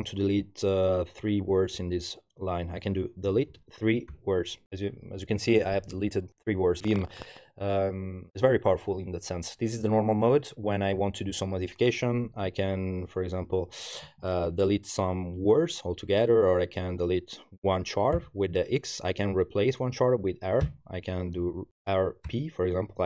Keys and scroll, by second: 3.1-4.1 typing, 12.5 Tab, 13.0 Tab, 13.1 Tab, 13.3 Tab, 13.4 Tab, 14.0 Tab, 18.2 x, 20.6 r, 22.3 p.